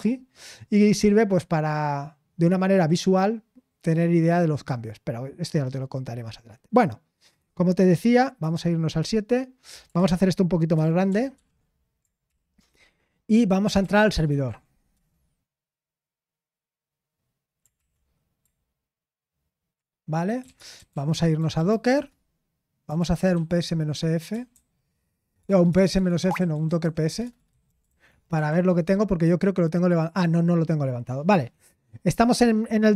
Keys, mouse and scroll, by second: 8.4 super+7, 10.7 ctrl+*, 11.0 ctrl+*, 11.3 ctrl+*, 12.2 ctrl+*, 13.6 ctrl+l, 13.8-15.4 typing, 17.5-18.2 typing, 20.4 Return, 20.9 c, 22.6-28.6 typing, 30.5 typing.